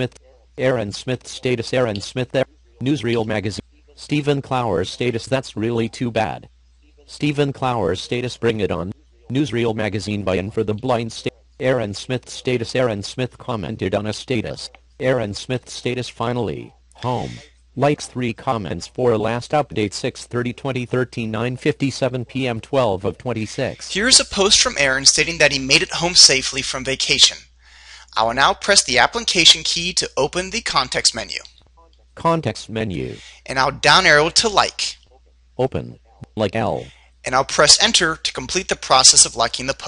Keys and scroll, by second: 29.5 shift+f, 33.4 Down, 38.5 Return.